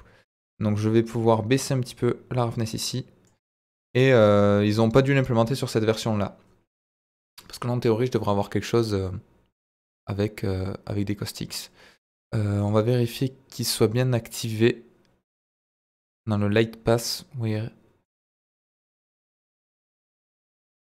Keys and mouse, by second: 0.3 click, 1.9-3.3 drag, 3.7-4.1 middle drag, 8.3-9.8 middle drag, 12.5 click, 14.4 click, 18.0 click, 19.3 click, 20.7 click.